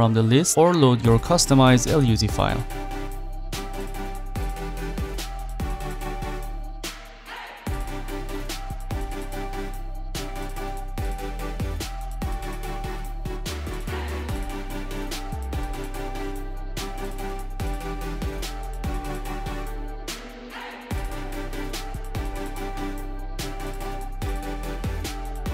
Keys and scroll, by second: 24.4 Escape.